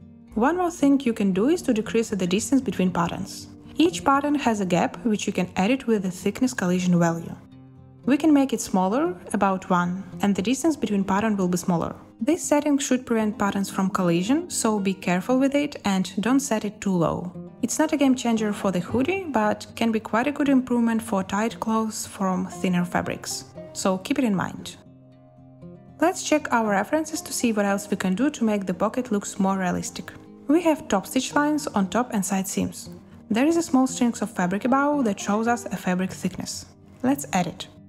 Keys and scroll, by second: 4.8 a, 9.3 1, 9.5 Return, 11.3 space, 20.7 space.